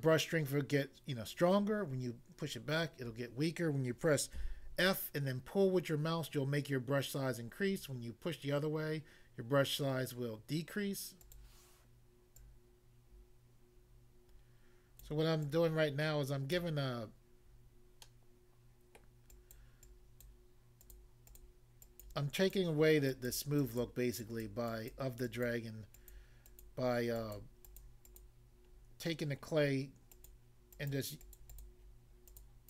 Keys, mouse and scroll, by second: 4.3 f.